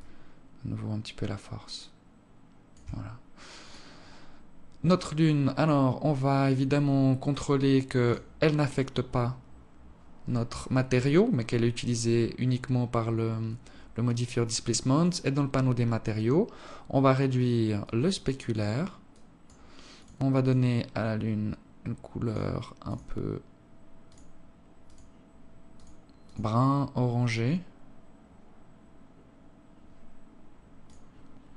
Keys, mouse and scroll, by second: 3.2 click, 4.1-4.8 scroll up 1, 5.2 click, 6.5-7.7 scroll up 12, 7.7 click, 14.6 click, 15.6-16.1 scroll down 2, 16.1 scroll down 2, 16.4 scroll up 1, 17.4 click, 18.8 click, 30.5 click, 31.4-31.5 scroll down 1.